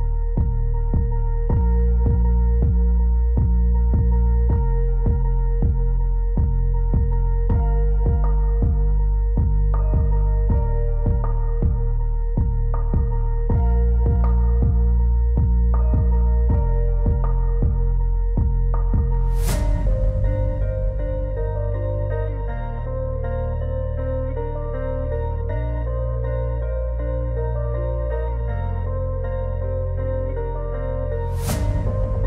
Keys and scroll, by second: 21.8 alt+w.